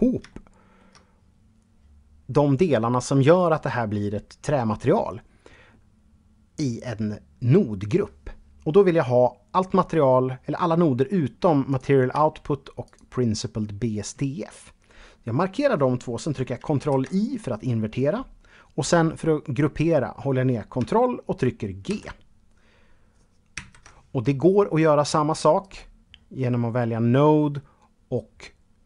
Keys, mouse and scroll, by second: 10.9 click, 12.0 shift+click, 21.0 ctrl+g, 22.7 ctrl+z.